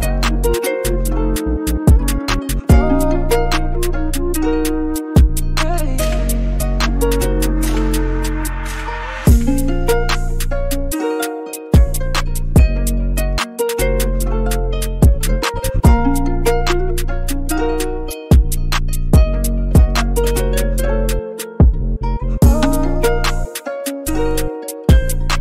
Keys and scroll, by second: 4.4 super+t, 5.4 scroll down 5, 6.0 scroll up 1, 7.0 super+t, 7.0-7.4 scroll down 4, 8.2-8.7 scroll down 2, 8.7 scroll up 2, 9.0 Return, 22.4 super+c, 23.4 super+v, 23.7 super+t.